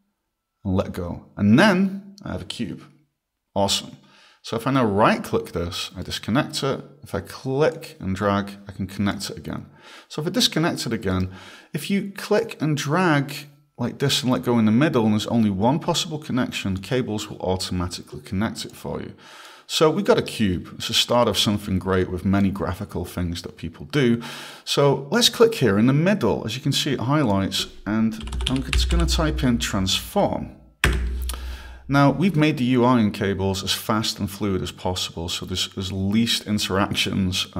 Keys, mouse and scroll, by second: 6.0 right click, 7.7 click, 11.1 right click, 12.4 click, 18.7 click, 19.7 right click, 21.7 click, 27.3 click, 28.0-29.5 typing, 30.9 Return.